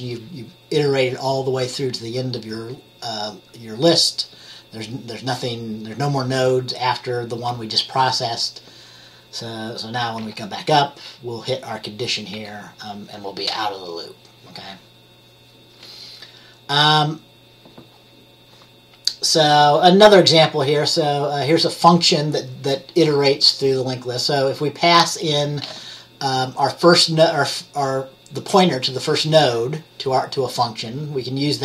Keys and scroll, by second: 10.3 F10, 12.5 F10.